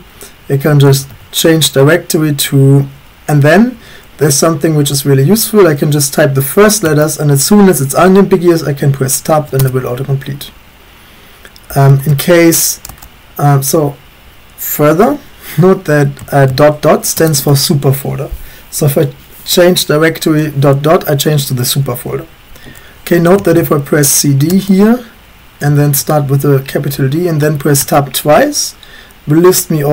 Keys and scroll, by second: 0.0-1.6 typing, 6.9 Tab, 9.6 Return, 11.7-12.8 typing, 14.2 typing, 16.2 typing, 17.2 Return, 23.4-24.5 typing, 26.2-26.9 typing, 27.5 Tab, 27.8 Tab.